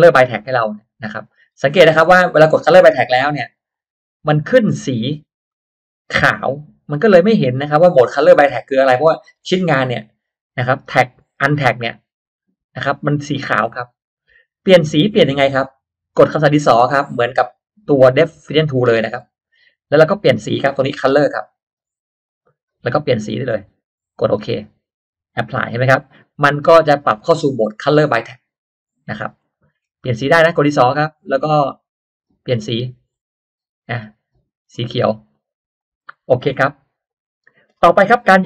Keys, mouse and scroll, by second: 0.7 click, 1.4 click, 2.0-2.3 scroll up 1, 2.1 middle click, 3.1 click, 3.7 click, 5.4-5.7 scroll up 1, 5.5 middle click, 7.7 click, 8.2 click, 8.8-9.1 scroll up 1, 9.1 middle click, 19.1 click, 22.2 click, 23.5 click, 24.7 click, 25.7-26.1 scroll up 1, 29.1 scroll down 1, 29.5 middle click, 31.2 click, 33.1 click, 34.4 click, 35.3 click, 36.0 middle click, 36.0-36.8 scroll up 2, 38.1 scroll down 1.